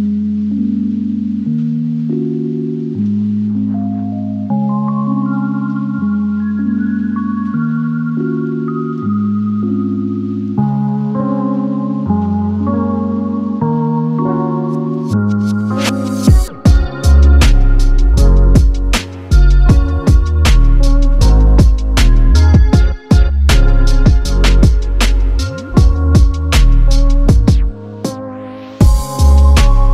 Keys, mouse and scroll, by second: 1.8 scroll up 11, 2.2 middle click, 2.9 scroll down 12, 3.2 middle click, 3.8 typing, 5.3 Return, 6.0-8.1 typing, 8.3 middle click, 9.1 Up, 10.9 Return, 11.2 middle click, 11.9-12.7 scroll up 1, 13.9 Return, 14.0 space, 14.3 middle click, 14.4 space, 15.4 middle click, 15.7 double click, 16.4 Delete, 16.5-16.9 scroll down 3, 16.9 Delete, 17.0 middle click, 17.9-18.4 typing, 18.2 shift+click, 20.2 Return, 20.4 scroll down 5, 20.6 middle click, 20.9 scroll up 1, 21.1-21.7 scroll down 3, 21.7 typing, 26.1 middle click, 27.0 space.